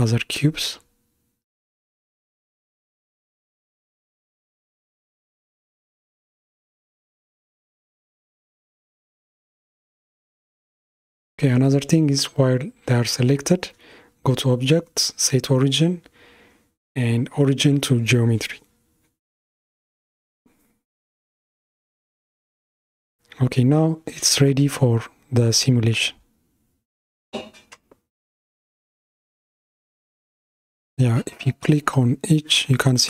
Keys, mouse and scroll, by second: 3.2 alt+z, 4.5 Tab, 5.3-6.9 middle drag, 6.9 KP_1, 13.9-17.1 drag, 18.5-20.7 middle drag, 20.7 Tab, 22.0 alt+z, 23.3 Tab, 24.2-27.2 middle drag, 27.6 click, 29.1 click, 30.2 click, 31.3 click.